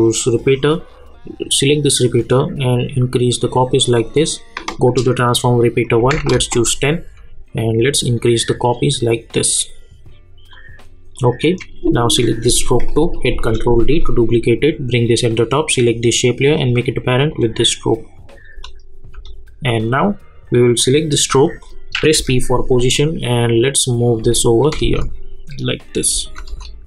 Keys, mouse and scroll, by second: 6.3 Return, 7.6-10.5 drag, 13.3 ctrl+d, 14.0-15.7 drag, 18.5 space, 19.8 click, 22.1 p, 23.2-24.8 drag, 24.8 space.